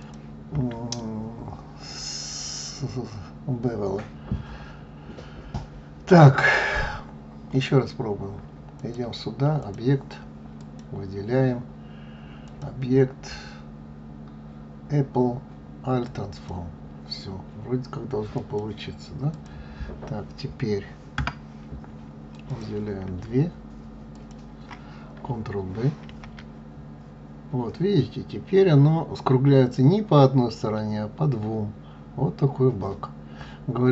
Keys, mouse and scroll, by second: 8.7-10.7 drag, 12.4-15.4 drag, 18.3 click, 19.2 click, 21.1 Tab, 22.4 click, 24.0 shift+click, 26.0 ctrl+b.